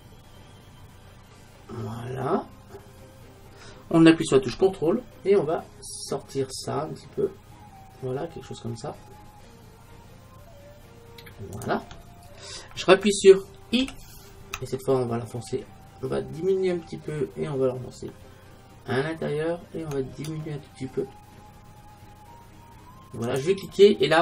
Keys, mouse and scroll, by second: 11.7-13.4 drag.